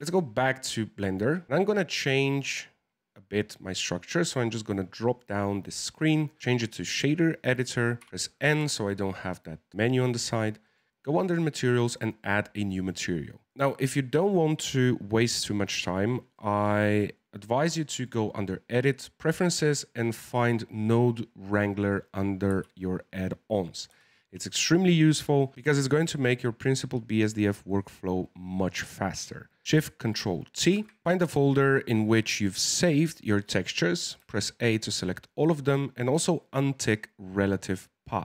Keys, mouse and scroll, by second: 1.6 click, 6.3-7.5 drag, 8.0 n, 10.6 click, 11.5 click, 12.2-13.5 middle drag, 17.9-21.0 drag, 30.5 ctrl+shift+t.